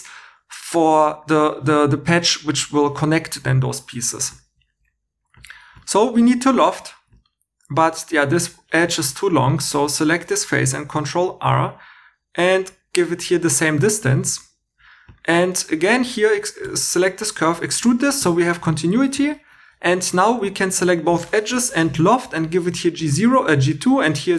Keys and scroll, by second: 4.1 3, 4.6 3, 6.0 2, 9.7 3, 10.8 super+r, 15.5 2, 16.6 e, 18.2 2, 18.9 x, 19.7 2, 21.5 l.